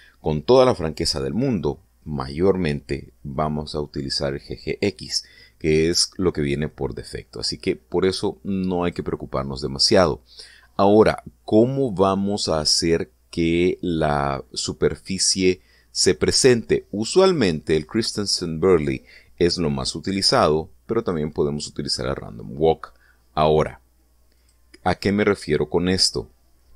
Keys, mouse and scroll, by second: 9.4 click, 20.3 click, 21.6 click, 24.1 click, 25.0 click.